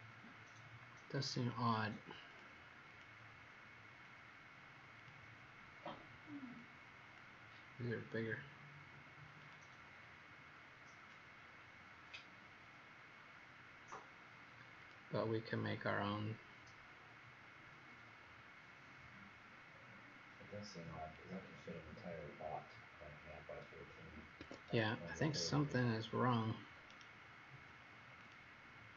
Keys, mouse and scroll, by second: 2.3 click, 2.8 click, 4.9 click, 17.3-18.1 scroll down 1, 18.7-19.6 scroll down 2, 19.6-21.1 scroll down 7, 21.1 click, 24.3 Escape, 26.8 right click, 28.1 click.